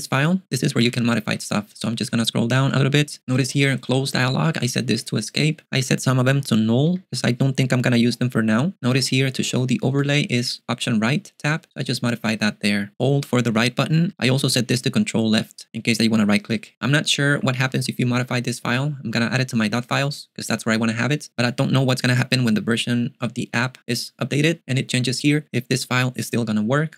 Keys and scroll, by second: 0.0-1.3 typing, 1.8 ctrl+d, 2.7 ctrl+d, 3.7-4.7 typing, 6.3-6.9 typing, 9.4 ctrl+d, 9.9-10.4 typing, 17.6 ctrl+u.